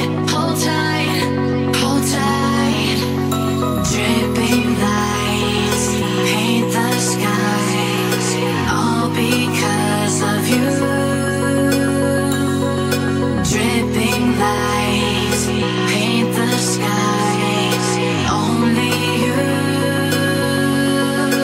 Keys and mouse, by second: 0.3 click, 2.3 r, 2.7 y, 7.7-8.9 middle drag, 9.6 click, 10.7 click, 11.0 click, 11.4 click, 11.6 click, 12.2 click, 13.2 middle click, 16.1 r, 16.5 y, 19.0-20.2 middle drag, 20.7-21.3 middle drag.